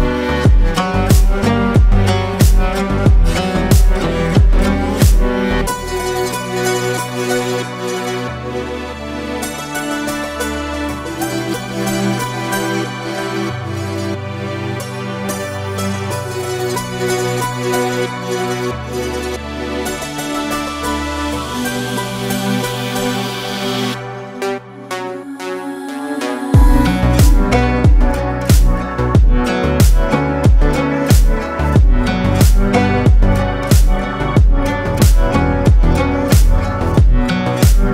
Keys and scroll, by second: 1.7 alt+shift+Up, 2.4 alt+shift+Up, 3.8 alt+shift+Up, 4.3 alt+shift+Up, 5.5 alt+space, 7.0 ctrl+alt+space, 7.5 ctrl+alt+c, 12.6 ctrl+v, 17.5 ctrl+space, 23.2 ctrl+space, 29.6 ctrl+space.